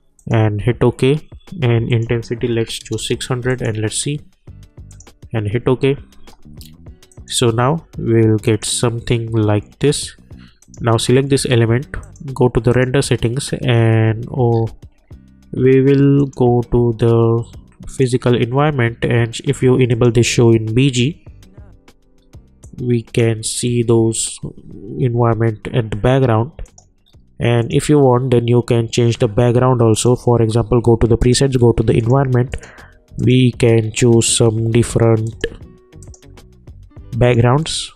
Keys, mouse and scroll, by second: 14.5-16.2 scroll up 1, 16.2 click, 22.7-25.4 drag, 26.6 click, 27.0 scroll up 1, 27.6 click, 30.0 click, 33.8 scroll up 1, 35.2 click.